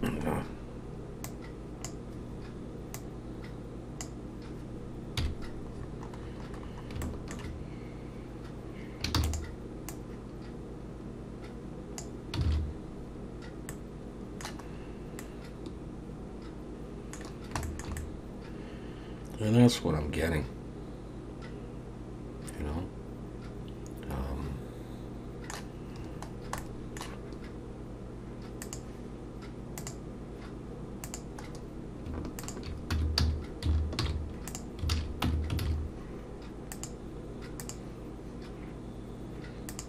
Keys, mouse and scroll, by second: 0.3-0.6 scroll up 2, 1.3 click, 3.0 click, 5.2 KP_1, 5.8-7.0 scroll down 12, 7.0 shift+middle click, 9.2 shift+d, 9.9 click, 12.5 alt+a, 12.7-13.7 scroll down 4, 13.7 middle click, 14.7-15.2 scroll up 3, 15.2 middle click, 17.3-17.6 scroll down 2, 17.6 shift+middle click, 18.0 middle click, 26.3 scroll down 1, 26.6 middle click, 28.6 click, 31.0 click, 31.5-32.1 scroll up 2, 32.4 shift+click, 32.9 Tab, 33.2 a, 34.0 alt+n, 34.9 alt+a, 35.3 Tab, 35.6 alt+a, 35.8-36.7 scroll down 2, 36.7 click, 37.6 click, 39.7 click.